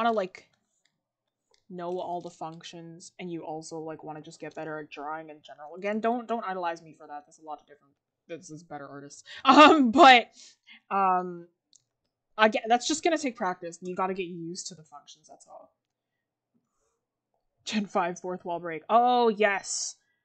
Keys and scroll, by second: 19.0 ctrl+z.